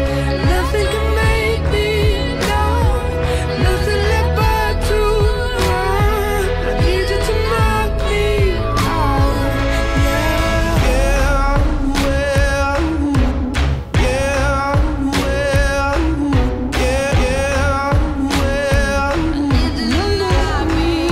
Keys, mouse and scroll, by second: 0.0 click, 1.6 click, 3.4-4.7 drag, 5.2-6.6 drag, 8.6 click, 9.3-9.9 typing, 10.1 click, 10.9 click, 12.7-14.7 drag, 15.6-16.8 drag, 17.5-18.5 drag, 19.3-21.1 drag.